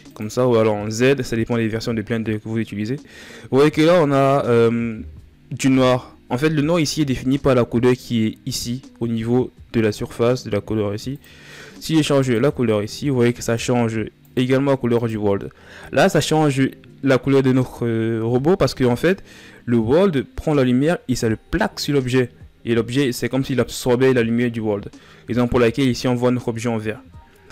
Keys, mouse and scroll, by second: 3.5-5.4 middle drag, 5.4 KP_1, 10.8-13.1 drag.